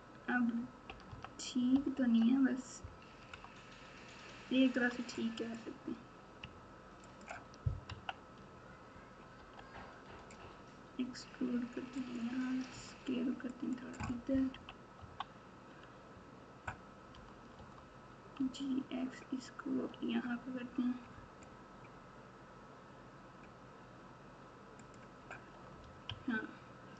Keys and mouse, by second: 0.8 KP_4, 1.0 KP_4, 1.7 KP_8, 1.9 KP_8, 3.2 Tab, 5.4 click, 7.0 ctrl+click, 7.8 KP_3, 9.3 e, 12.7 s, 14.5 KP_1, 14.9 KP_9, 17.1 g, 26.0 ctrl+KP_6, 26.5 ctrl+KP_6.